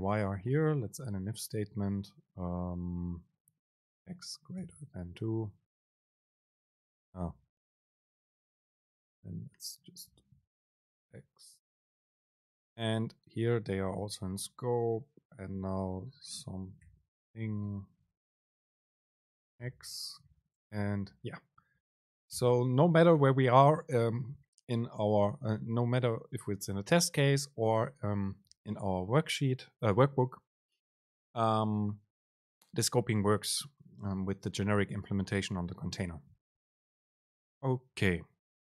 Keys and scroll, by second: 7.5 Up, 8.3 super+Left, 9.1 shift+Right, 10.7 BackSpace, 11.3 Down, 11.9 super+space, 16.8 BackSpace, 19.7 Return, 20.6 super+space, 22.1 shift+Up, 22.4 BackSpace.